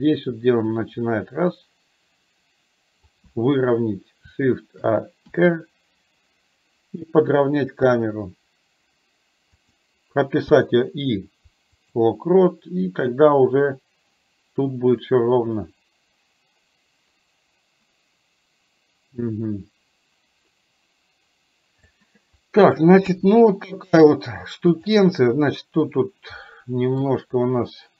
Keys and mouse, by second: 13.2-21.9 drag, 13.2 i, 23.0 KP_1, 24.8 click, 27.2-27.9 drag.